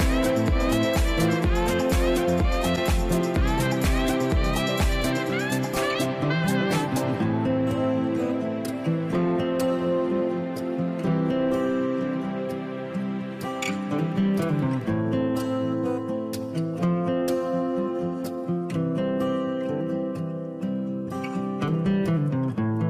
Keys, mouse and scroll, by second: 8.2-8.6 scroll up 1, 8.6-11.1 scroll down 1, 13.0-15.1 scroll up 1.